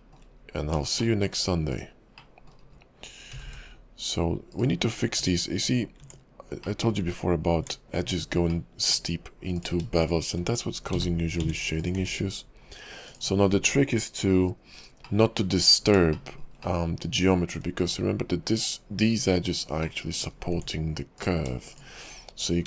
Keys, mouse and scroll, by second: 0.3-0.8 scroll up 2, 1.0 shift+middle click, 1.7 click, 2.2 middle click, 2.5 scroll down 1, 3.3-4.7 scroll up 1, 3.3 g, 4.9-5.7 scroll up 4, 5.1 Tab, 6.0 Tab, 6.6 middle click, 7.0 Tab, 8.5 middle click, 9.6 click, 10.0 shift+click, 11.1 j, 11.4 Tab, 11.8 click, 12.0 x, 15.0 middle click, 16.1 shift+middle click, 16.6 middle click, 19.8 middle click, 20.5 Tab, 21.2 click, 21.7 shift+click.